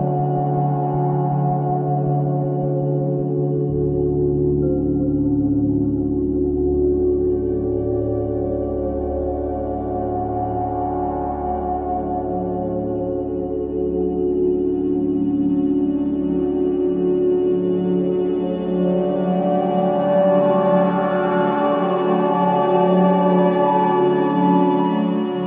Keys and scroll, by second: 1.5 c, 11.6 ctrl+z, 12.4 Delete, 17.2 Escape, 20.9 F2.